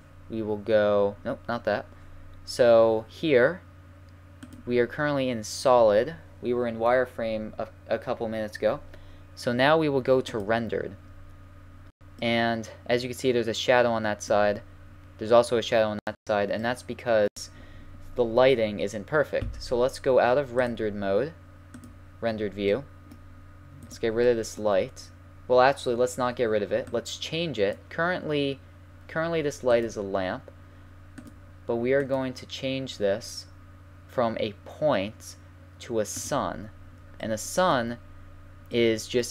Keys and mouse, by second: 0.9 click, 4.4-6.3 drag, 11.7-19.2 middle drag, 20.8 click, 22.5-23.0 middle drag, 23.9-25.6 right drag, 25.6 middle click, 26.5 middle click, 26.8-28.6 drag, 29.8-33.8 drag, 36.3-38.1 drag, 38.1-39.3 middle drag.